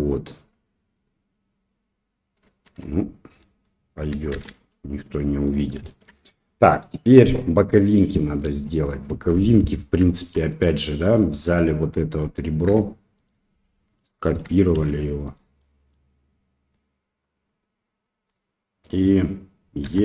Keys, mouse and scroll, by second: 2.6 Tab, 3.4 middle click, 4.3 shift+z, 4.5-5.4 middle drag, 5.8 shift+middle drag, 7.7-8.1 middle drag, 8.5 click, 9.0 Tab, 10.0 shift+middle click, 11.0 click, 12.6 2, 13.1 click, 14.7 shift+d, 15.5 middle click, 16.7-18.2 middle drag, 19.8 e.